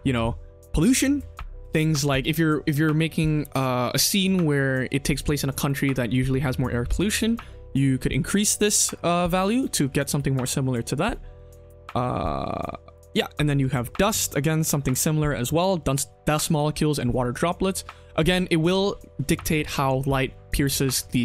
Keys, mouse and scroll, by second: 0.8 ctrl+z, 7.4 click, 9.4 shift+middle drag, 11.3-12.9 drag, 17.2 click.